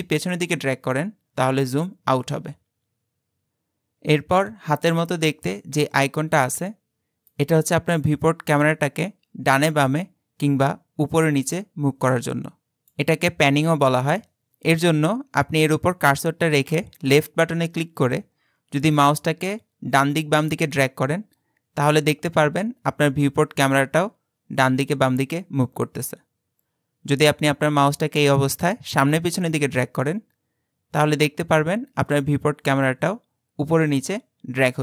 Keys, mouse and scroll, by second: 7.3-10.4 drag, 16.8-19.8 drag.